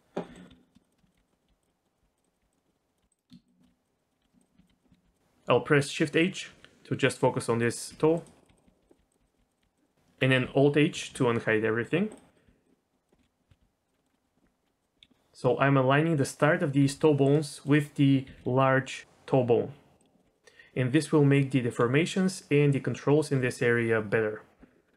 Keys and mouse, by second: 0.2 middle click, 0.5-3.0 typing, 0.6 middle click, 0.8 click, 1.3 middle click, 1.7 middle click, 2.2 click, 2.6 middle click, 2.9 click, 4.0 click, 4.2-5.0 typing, 6.5 shift+h, 7.1 click, 7.9-9.6 typing, 8.6 click, 9.8 click, 10.9 alt+h, 12.1 click, 12.4 g, 12.7 middle click, 13.2 KP_3, 13.5 z, 13.6 g, 14.0 middle click, 14.1 middle click, 14.4 middle click, 14.8 click, 16.8 g, 17.6 click, 18.2 g, 20.2 g.